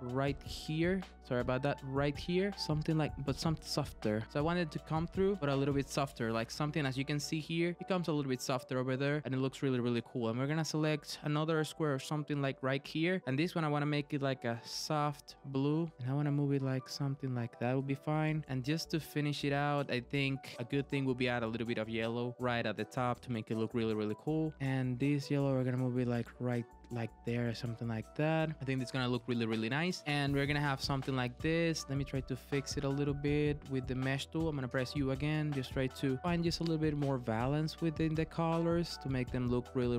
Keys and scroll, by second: 32.8 super+z.